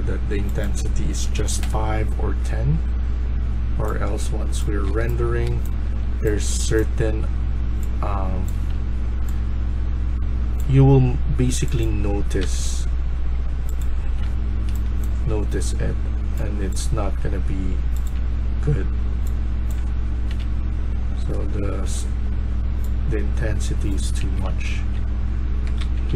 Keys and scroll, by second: 1.3 5, 1.5 Return, 4.4-5.9 typing, 12.3 1, 13.7-14.6 typing, 19.7 a, 20.1 a, 20.3-21.1 a, 21.1 e, 23.9-26.1 typing.